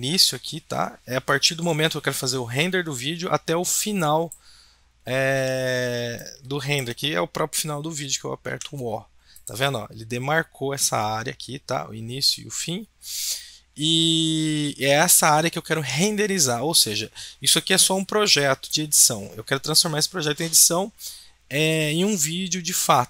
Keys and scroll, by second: 8.5 o.